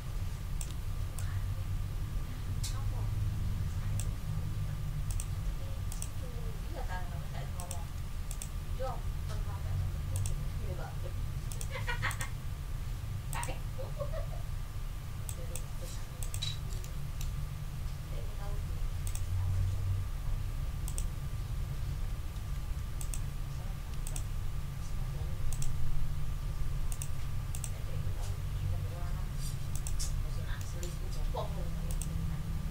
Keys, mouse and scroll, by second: 1.1-4.1 ctrl+drag, 5.1 ctrl+click, 5.9 ctrl+click, 6.5-6.8 ctrl+scroll up 1, 7.5 click, 8.3 shift+click, 10.1 click, 11.5 click, 12.1 click, 13.3 click, 15.2 click, 16.2 click, 16.8 ctrl+click, 19.0 click, 20.8 click, 22.3 d, 23.0 click, 24.0 shift+click, 25.5 shift+click, 26.9 click, 27.5 click, 29.7 click, 30.2 ctrl+scroll down 2, 30.6 ctrl+click, 31.9 click.